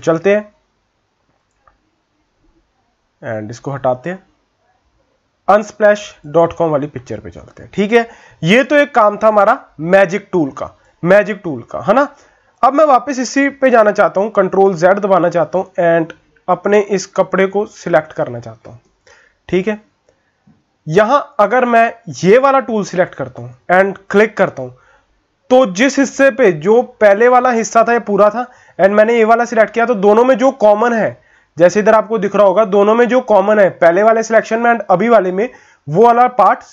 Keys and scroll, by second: 14.2 ctrl+z, 14.6 ctrl+z, 15.4 ctrl+z, 16.0 ctrl+z, 16.6 ctrl+z, 17.1 ctrl+z, 26.9 ctrl+z.